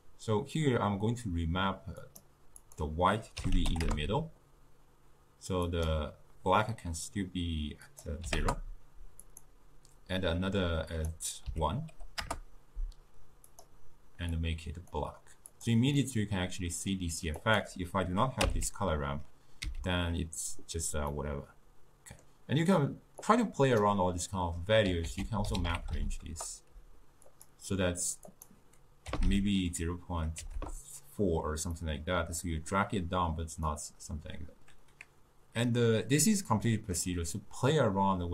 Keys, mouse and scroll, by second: 2.1-13.6 drag, 16.0-17.4 middle drag, 17.4 click, 18.8 m, 20.0 m, 21.2-23.3 middle drag, 23.3 drag, 24.3 middle click, 25.1 ctrl+a, 28.4-31.4 drag, 31.9-36.8 middle drag, 37.4-38.3 middle drag.